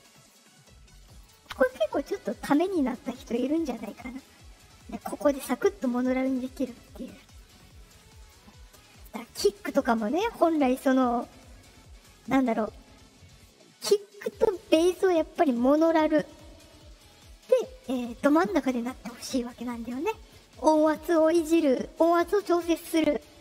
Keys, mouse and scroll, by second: 1.2 click, 5.1-6.7 drag, 7.2 right click, 8.1 click, 9.1 click.